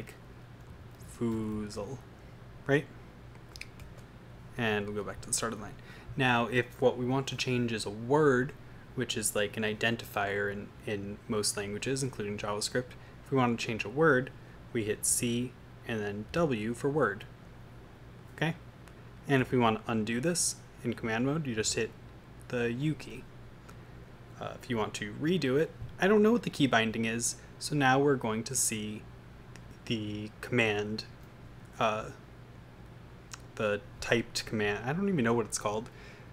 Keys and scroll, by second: 0.5-2.0 typing, 4.7 Escape, 4.9 0, 15.1-16.8 typing, 19.4 Escape, 21.6 u, 31.1 :.